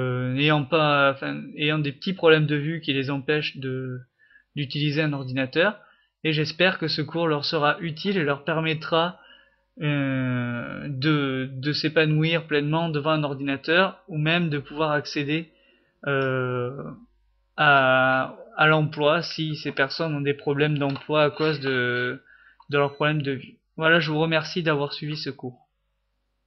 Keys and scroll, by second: 25.3-26.3 typing.